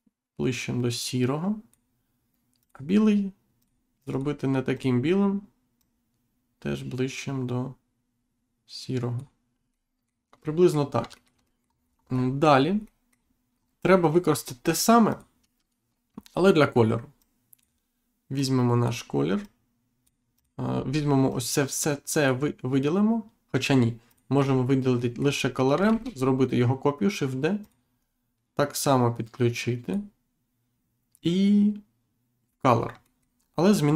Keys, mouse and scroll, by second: 2.6 click, 3.6 click, 4.7 click, 5.8 click, 9.7 middle click, 11.1 shift+middle click, 11.8 scroll down 1, 12.2 middle click, 12.8 scroll up 1, 13.0 middle click, 13.5 scroll down 1, 13.9 middle click, 14.4 scroll down 1, 15.1 click, 16.2-17.1 scroll down 2, 17.2 click, 18.3 click, 19.4 click, 20.7-21.1 scroll down 1, 21.3 click, 24.1 click, 24.4-24.8 scroll up 1, 24.9 middle click, 25.3-25.7 scroll up 1, 25.9 shift+d, 27.6 click, 27.9-28.3 scroll up 1, 28.8 click, 31.1 click, 33.0 shift+middle click, 33.4-33.9 scroll up 2.